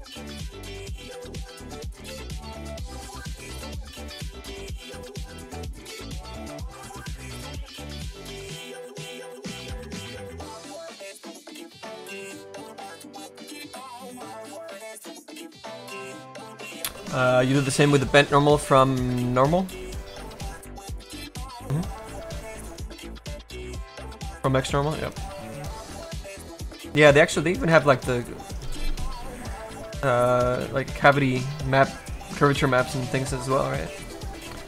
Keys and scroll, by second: 0.0-2.9 typing, 1.9 Return.